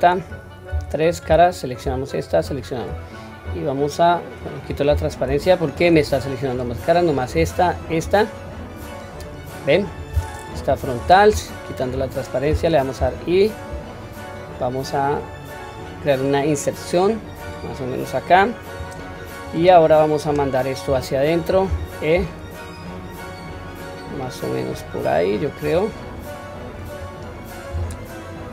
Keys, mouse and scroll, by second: 0.6 3, 1.1 click, 2.2 shift+click, 3.4 scroll down 1, 3.7-4.3 middle drag, 4.8 q, 5.4 middle click, 5.9 click, 6.4 click, 7.5 shift+click, 8.0-8.5 middle drag, 8.7-9.1 scroll up 3, 9.4 middle click, 9.9 scroll down 1, 11.0 KP_1, 11.4-11.7 shift+middle drag, 12.0-12.4 scroll up 2, 12.9 typing, 18.4-19.1 middle drag, 19.4-19.8 scroll down 1, 19.8-20.4 middle drag, 21.6 e, 25.9-26.7 middle drag, 26.9-27.6 scroll up 1, 27.6 s.